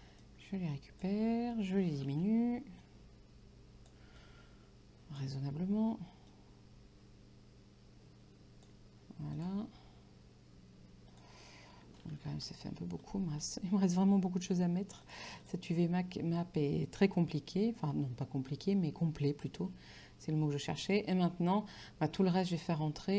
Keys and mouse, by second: 2.2 ctrl+t, 2.9 shift+click, 4.2 click, 6.4 shift+click, 9.4 click, 11.2 click, 12.4 t, 13.1 shift+click, 15.1 click.